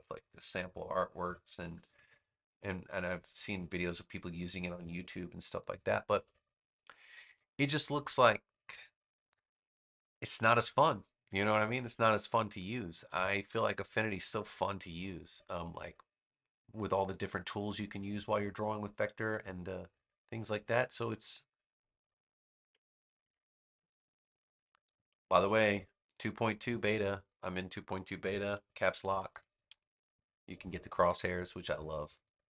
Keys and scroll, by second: 12.6 space.